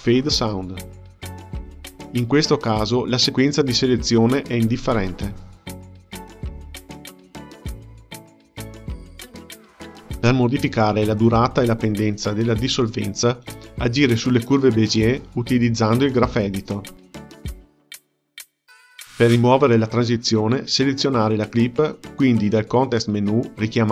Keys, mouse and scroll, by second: 1.0 shift+click, 1.7-4.5 right drag, 4.5 click, 5.0 space, 8.1 space, 11.5 shift+F6, 14.0 click, 15.0 shift+click, 15.9 g, 21.0 shift+F8, 23.0 click, 23.6-23.9 right drag.